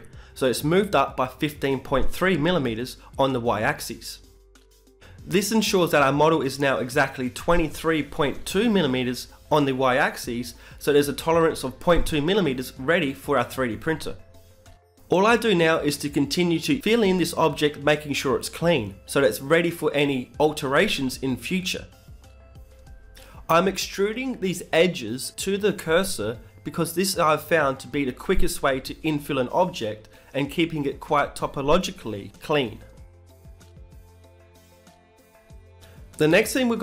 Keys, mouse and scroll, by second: 2.9 Tab, 3.5 middle click, 17.1 Tab, 18.1 middle click, 19.1-21.0 right drag, 19.5 shift+s, 21.7-23.3 right drag, 22.0 b, 23.0 e, 23.3 s, 23.6 ., 24.1 s, 25.9 s, 28.4-30.7 right drag, 29.2 e, 29.7 s, 32.5-35.0 right drag, 33.5 e, 34.1 s, 36.2 right click, 36.5 shift+s.